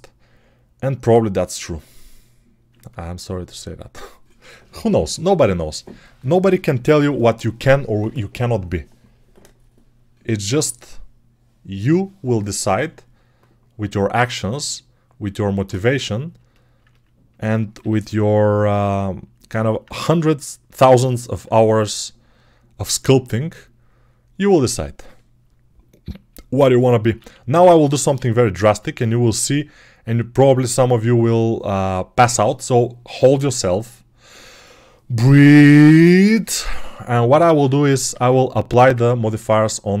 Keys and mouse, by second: 17.6 g, 27.1 alt+q, 35.6-37.0 right drag, 37.0-39.8 alt+drag, 37.9 alt+q, 39.2 ctrl+Tab, 39.8-40.0 middle drag.